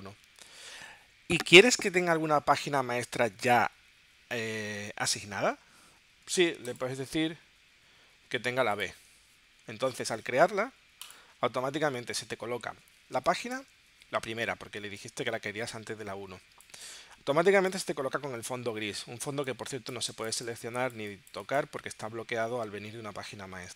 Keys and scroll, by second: 13.2 space, 14.8 space.